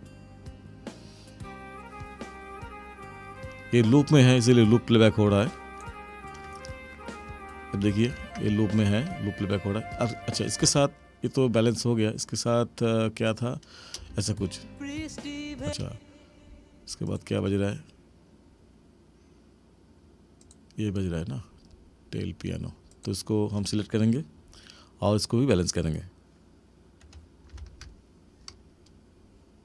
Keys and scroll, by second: 8.1 ctrl+=, 10.6 space, 13.9 space, 15.6 space, 27.5 ctrl+=.